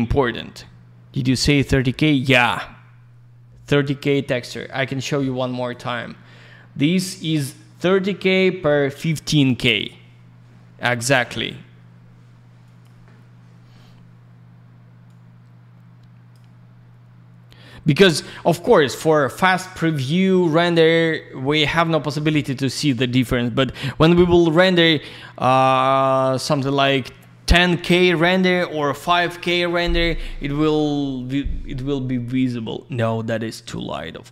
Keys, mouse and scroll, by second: 3.8 middle click, 5.0 click, 5.1 click, 5.6 click, 5.7 click, 12.6 click, 12.8 click, 15.0 click, 24.8 click, 33.1 click.